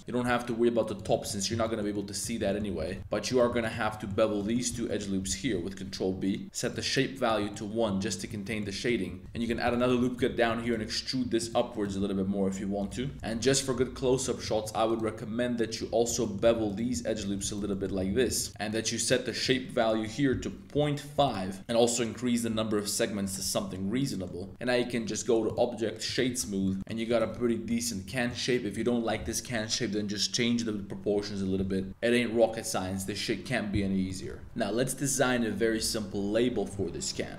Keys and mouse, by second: 0.0 super+z, 0.2 e, 0.9 click, 1.1 shift+middle click, 1.2 click, 1.6 shift+click, 1.9 click, 2.4 shift+click, 2.7 g, 2.9 z, 3.0 alt+2, 3.2 alt+click, 3.8 shift+middle click, 4.3 middle click, 4.8 shift+middle click, 5.2 super+b, 6.7 click, 7.5 shift+click, 8.0 middle click, 8.5 shift+click, 9.0 3, 9.2 super+z, 9.6 super+r, 9.8 click, 10.0 shift+click, 10.3 3, 10.6 alt+click, 11.4 alt+click, 11.7 alt+click, 11.9 e, 12.8 click, 13.1 KP_Decimal, 13.2 2, 13.2 middle click, 15.1 middle click, 16.2 middle click, 17.2 super+z, 17.7 middle click, 18.0 super+b, 18.5 click, 19.5 click, 20.0-21.2 drag, 21.6 click, 23.4 Tab, 23.6-24.2 middle drag, 25.4 click, 26.6 shift+drag, 26.8 middle click, 26.8 a, 27.0 click, 27.3 Tab, 27.4 click, 28.1 shift+click, 32.3 Tab, 34.0 click, 34.4 Tab.